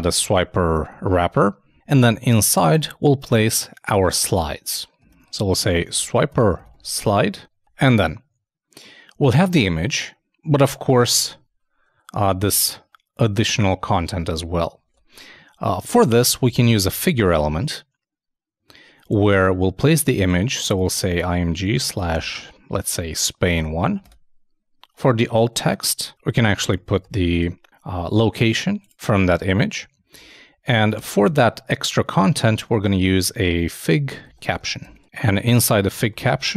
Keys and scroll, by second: 11.2 super+Tab, 12.3 super+2, 14.8 super+Tab, 26.4 shift+a, 30.1 super+Right, 30.9 super+Return.